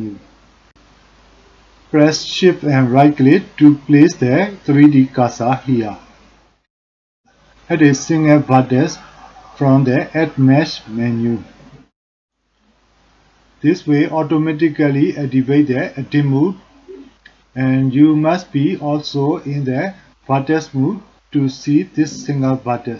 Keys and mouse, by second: 4.8 shift+click, 8.3-11.5 drag, 15.5 click, 17.0 click.